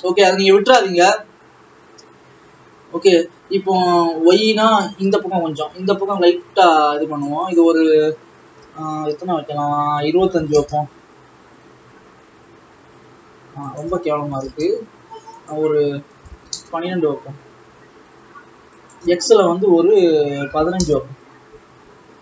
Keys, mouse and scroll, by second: 6.2-18.5 drag, 18.8-22.2 drag.